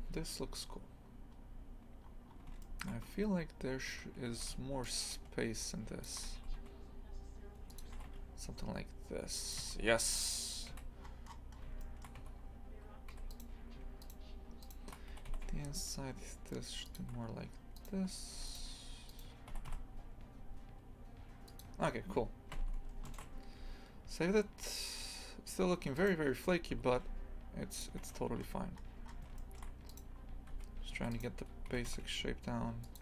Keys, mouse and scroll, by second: 1.1-1.4 scroll up 2, 2.0 scroll up 4, 2.3-2.6 scroll down 1, 2.6 shift+middle click, 3.1 Tab, 3.9 1, 4.3 a, 6.0 shift+click, 6.4 s, 9.6 Tab, 9.8-10.2 scroll down 10, 10.7 a, 11.0-11.4 scroll up 10, 11.8 shift+middle click, 12.2 Tab, 12.4 scroll up 1, 13.1 2, 13.3 right click, 14.0 shift+right click, 14.6 shift+right click, 15.2 g, 17.8 right click, 18.3 1, 18.5 right click, 19.1 right click, 19.6 g, 21.8 scroll down 1, 22.6 Tab, 23.5 scroll down 1, 26.0 right click, 26.7 g, 28.4 scroll up 1, 29.1 scroll up 9, 29.4 shift+middle click, 29.9 right click, 30.2 scroll up 2, 30.5 Tab, 31.1 right click, 31.7 g.